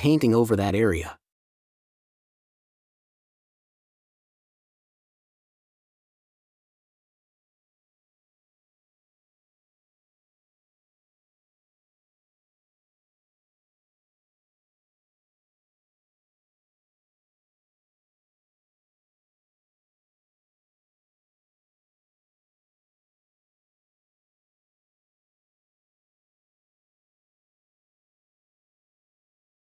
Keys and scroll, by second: 9.7 space, 22.6 space, 28.0 space.